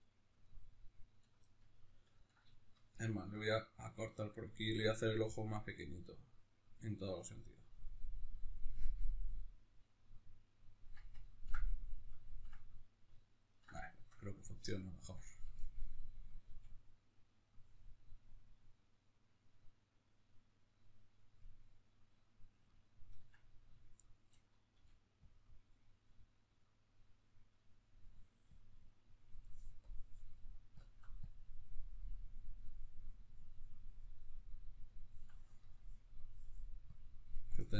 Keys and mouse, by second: 3.1-8.8 drag, 8.8-9.9 middle drag, 9.9 click, 10.7-15.0 ctrl+middle drag, 15.0 click, 16.2 f, 18.0-21.5 drag, 21.5-25.0 middle drag, 24.5 f, 25.2-37.7 drag.